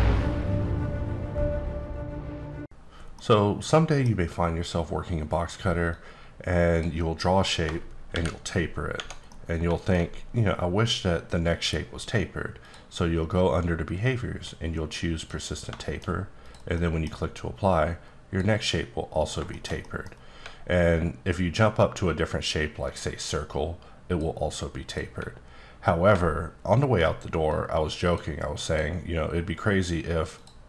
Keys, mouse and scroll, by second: 4.3 scroll up 1, 5.8 click, 8.1 shift+t, 8.9 Tab, 9.3 middle click, 10.2-12.1 scroll up 2, 12.1 scroll up 1, 12.6 click, 15.2 click, 15.8 shift+middle click, 16.4 click, 16.7 middle click, 17.7 click, 19.2 click, 19.5 shift+middle click, 20.6-21.5 alt+scroll up 2, 21.5 alt+scroll down 1, 21.7-22.1 alt+scroll up 2, 22.1-22.9 alt+scroll down 3, 23.3 click, 24.8 click, 25.5-26.5 alt+scroll up 1, 26.5-27.1 alt+scroll up 1, 27.5 click, 28.6 click, 30.3 click.